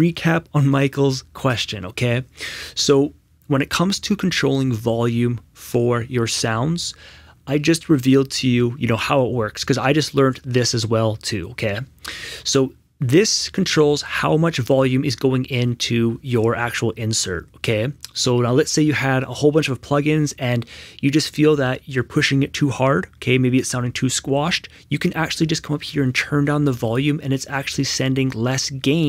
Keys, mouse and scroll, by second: 25.8 click.